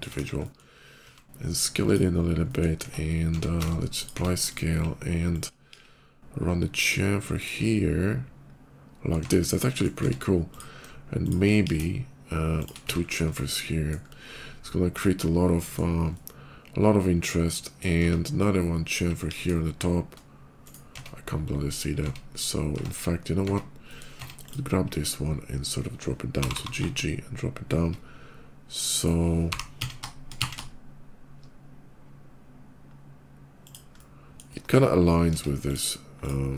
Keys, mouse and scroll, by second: 0.0 KP_5, 0.2 middle click, 0.8 s, 1.7 click, 2.2 middle click, 2.5 Tab, 3.4 ctrl+a, 3.5 Tab, 3.8 click, 4.3 click, 5.0 click, 5.5 ctrl+b, 7.1 click, 7.3 middle click, 9.1 Tab, 9.5 middle click, 10.3 click, 11.0 shift+click, 11.3 ctrl+b, 12.0 ctrl+shift+b, 12.6 Tab, 13.1 middle click, 14.3-15.3 middle drag, 15.8-17.5 middle drag, 17.9 Tab, 18.6 click, 18.9 ctrl+b, 20.5 right click, 20.9 Tab, 21.3 /, 21.7 Tab, 22.0 /, 22.2 scroll down 1, 23.6 middle click, 24.2 click, 24.8 /, 26.1 g, 26.4 g, 28.8 shift+middle click, 29.3-30.2 typing, 33.5 shift+click, 33.8 shift+middle click, 34.3 middle click, 35.3 Tab, 35.5 click, 36.0 click.